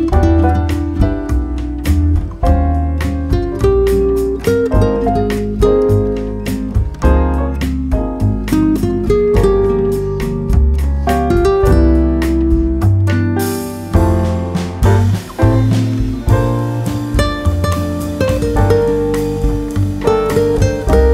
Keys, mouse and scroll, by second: 0.6-1.7 middle drag, 2.2-3.8 drag, 4.6-5.7 drag, 6.5 shift+1, 7.4 1, 10.9 z, 13.2-15.4 drag, 15.0 middle click, 16.1 z, 16.7-18.4 middle drag, 18.4-20.0 drag, 19.8 KP_7.